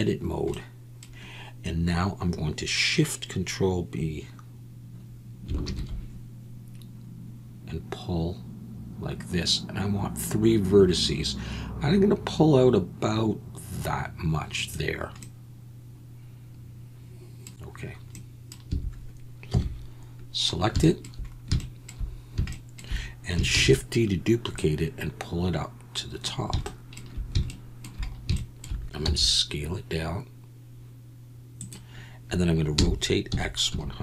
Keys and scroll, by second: 5.6 ctrl+shift+b, 18.7 a, 19.5 KP_1, 23.5 shift+d, 29.0 s, 32.7-34.0 typing.